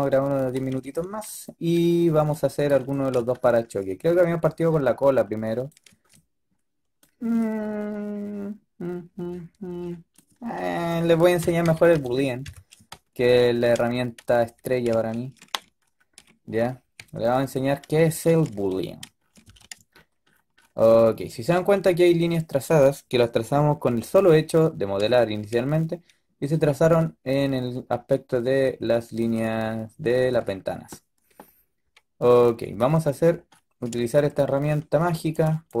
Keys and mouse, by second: 11.3 KP_5, 11.5 KP_3, 11.9 KP_5, 12.3 KP_5, 14.3 z, 16.9 a, 17.3 a, 18.4 z, 19.3 z, 20.1 middle click, 30.2 z, 35.6-35.8 drag.